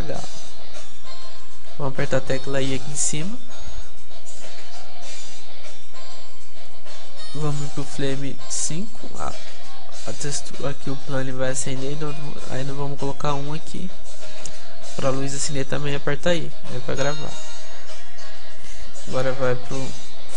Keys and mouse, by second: 6.7-8.4 drag, 14.4-16.6 drag, 19.1-20.3 drag.